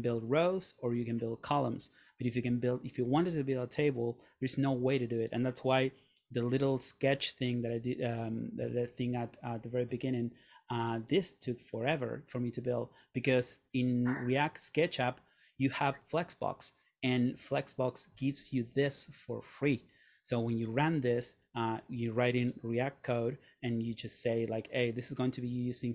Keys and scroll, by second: 8.7 super+Tab.